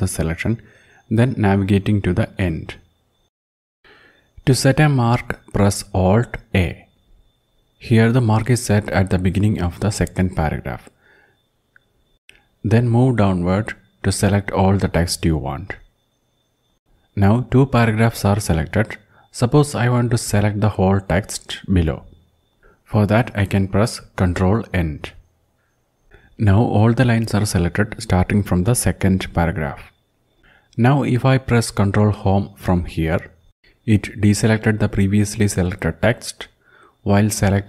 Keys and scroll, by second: 1.9 Down, 2.3 Down, 5.1 alt+a, 9.5 Down, 10.3 Down, 11.4 Down, 12.0 Down, 24.3 ctrl+End, 31.5 ctrl+Home.